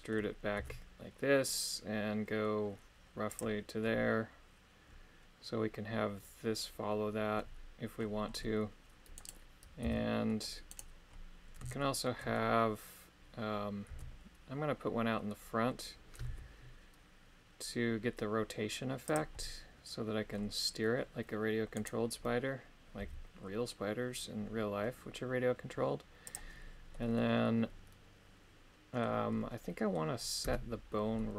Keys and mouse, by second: 0.6 e, 9.3 right click, 9.8 c, 10.6 right click, 11.9 shift+middle click, 14.0 e, 21.7 right click, 23.0 g, 26.9-29.0 middle drag, 29.6 middle click, 30.5 a, 31.1 middle click.